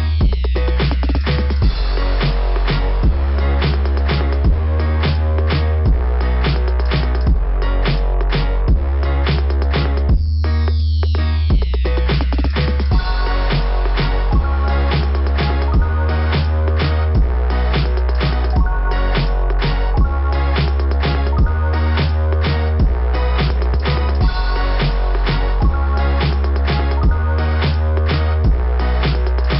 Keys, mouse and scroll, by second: 5.0 click, 8.8 click, 9.2 click, 9.5 click, 14.0 click, 14.4 click, 14.5 click, 17.4 click, 17.9 click, 18.1 click, 28.6 click, 28.9 click, 29.2 click.